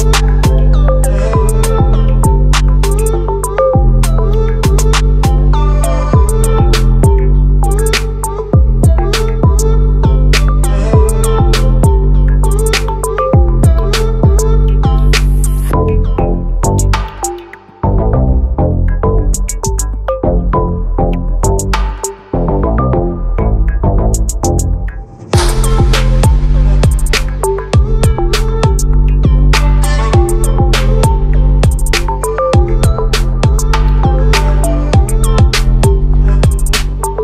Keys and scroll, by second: 0.0 ctrl+r, 6.0 ctrl+r, 32.8 ctrl+t, 35.5 ctrl+=, 35.7 ctrl+=.